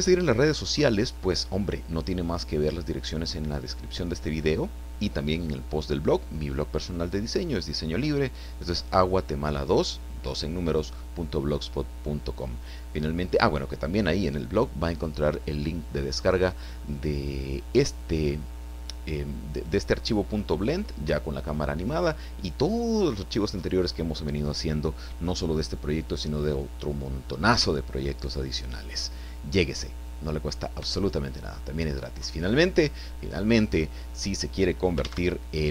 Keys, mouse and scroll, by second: 35.0 alt+a.